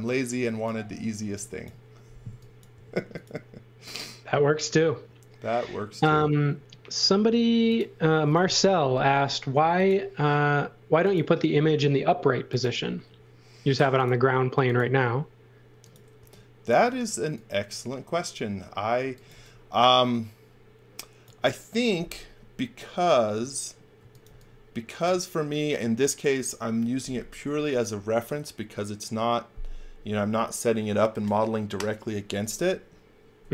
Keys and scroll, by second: 1.1 x, 2.7 c, 8.4 a, 16.1 e, 19.0 x, 19.3 v, 23.9 x, 24.2 v, 33.3-33.5 typing.